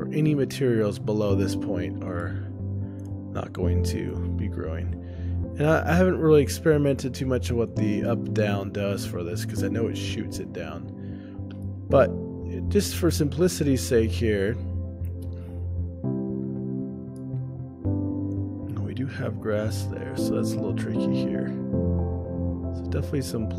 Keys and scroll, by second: 2.7 ctrl+alt+o, 11.7 shift+space, 17.9 ctrl+alt+o.